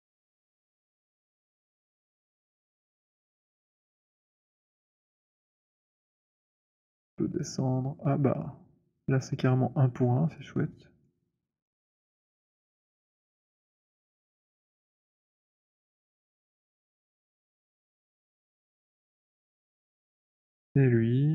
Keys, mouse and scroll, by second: 0.6 alt+right click, 1.1 alt+click, 1.6 click, 3.3 click, 5.3 click, 8.9 middle click, 11.1 alt+click, 11.6 alt+click, 12.3 middle click, 15.3 scroll, 15.7 alt+click, 17.1 right click, 17.6 click, 18.1 alt+click, 19.5 click.